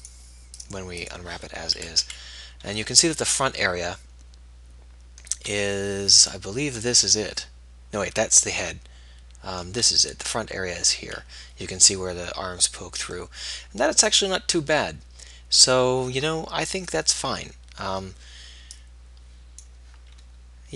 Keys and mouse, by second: 17.5-19.3 middle drag, 19.4 middle click, 19.6 click.